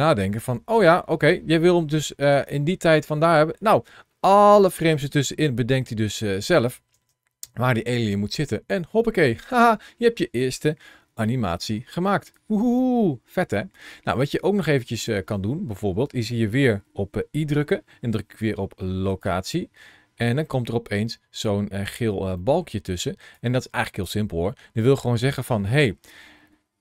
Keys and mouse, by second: 2.1 space, 4.6 space, 5.4-6.5 drag, 9.4 space, 12.1-14.9 drag, 17.3 i, 22.3 middle click, 23.1 click, 24.5 ctrl+shift+a, 24.5 shift+c.